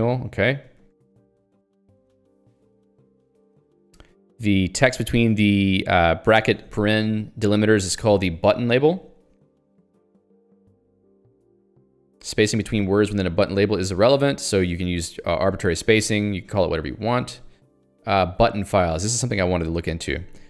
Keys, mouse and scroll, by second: 3.8 k, 4.2 l, 6.7 h, 8.2 j, 8.8 h, 10.2 j, 19.6 middle click.